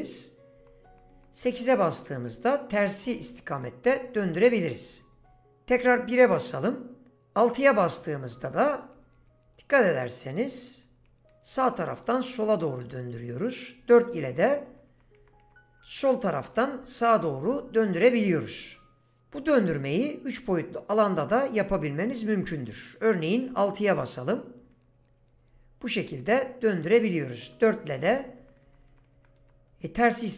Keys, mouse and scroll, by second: 0.0-5.7 typing, 7.5-12.3 typing, 13.7-18.6 typing, 23.9-26.3 typing, 27.4-30.3 typing.